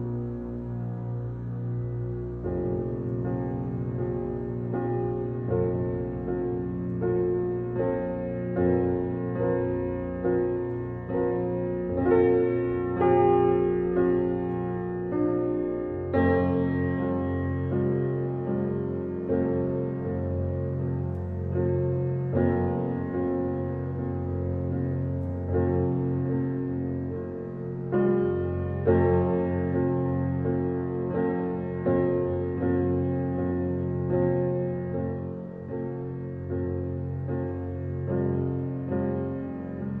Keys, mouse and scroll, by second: 0.7 g, 2.8 n, 5.3-7.2 drag, 7.2 ctrl+z, 9.5 \, 11.2-16.9 drag, 16.9 g, 20.1 g, 21.9 g, 27.2 click, 27.9 click, 35.9 click, 36.6-40.0 middle drag.